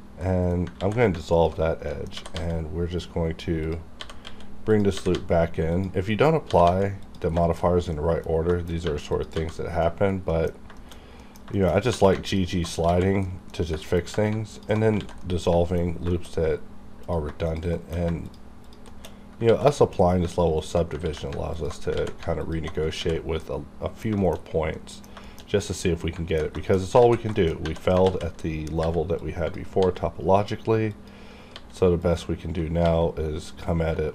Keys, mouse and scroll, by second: 0.8 ctrl+x, 1.2 alt+click, 1.6 scroll down 2, 1.9 middle click, 1.9 middle click, 2.2 g, 2.3 g, 3.6 click, 4.0 g, 4.2 x, 4.7 click, 4.7 click, 5.0 g, 5.1 g, 5.7 click, 6.1-6.5 scroll up 1, 6.5 g, 6.7 g, 7.0 click, 7.4 shift+middle click, 7.6 shift+scroll up 1, 7.9 middle click, 8.5 shift+middle click, 8.7 shift+scroll up 1, 8.9 1, 9.1 click, 9.1 click, 9.4 g, 9.7 right click, 10.0-10.7 scroll down 2, 10.3 middle click, 10.8 shift+middle click, 10.9 shift+scroll up 2, 11.2 middle click, 11.5 shift+middle click, 11.9 2, 12.3 alt+click, 12.9 x, 13.3 middle click, 13.8 middle click, 14.5 alt+click, 15.0 ctrl+x, 15.2 middle click, 15.2 middle click, 16.3-17.0 scroll up 1, 17.0 click, 17.0 click, 17.5 shift+click, 17.7 shift+middle click, 18.2 shift+click, 18.9 shift+middle click, 19.0-19.4 shift+scroll down 2, 19.5 ctrl+x, 19.6 ctrl+middle click, 20.0 scroll up 1, 20.6 alt+click, 21.0 ctrl+x, 21.6 alt+click, 22.0 ctrl+x, 22.4 alt+click, 22.4 alt+click, 23.0 ctrl+x, 23.1 ctrl+scroll down 1, 23.4 middle click, 24.2 shift+middle click, 24.5 scroll up 1, 24.7 middle click, 25.2 shift+middle click, 25.5 shift+scroll up 1, 25.7 middle click, 25.7 middle click, 26.4 alt+scroll down 1, 26.6 shift+middle click, 26.8 shift+scroll up 2, 27.0 alt+z, 27.3 shift+middle click, 27.5 scroll up 1, 27.6 1, 28.1 alt+a, 28.8 b, 29.2 click, 29.2 click, 29.7 g, 30.9 click, 31.5 g, 32.0 click, 32.8 g, 33.5 click.